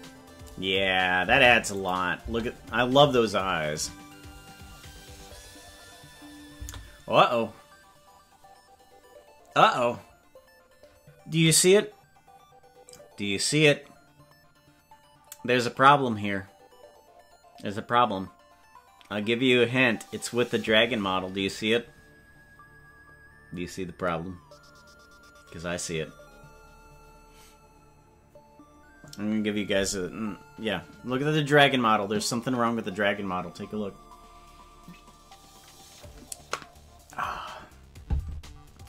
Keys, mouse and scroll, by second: 1.9 click, 2.2 space.